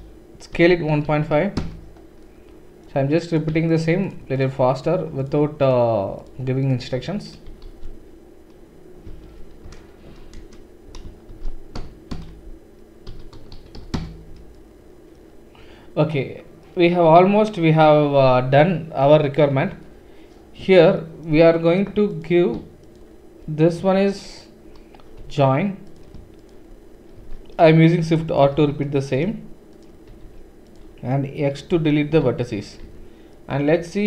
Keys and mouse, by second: 0.5 s, 4.3 shift+click, 4.4 shift+middle click, 4.8-6.2 shift+drag, 6.2-10.7 shift+middle drag, 7.6 alt+s, 11.3 alt+shift+s, 13.1 s, 22.9 shift+click, 25.2 j, 25.8 click, 26.4 shift+click, 27.2 shift+r, 28.5 shift+r, 29.2-30.7 shift+middle drag, 30.1 shift+r, 30.7 click, 30.7-34.0 middle drag, 31.7 x, 32.9 Tab.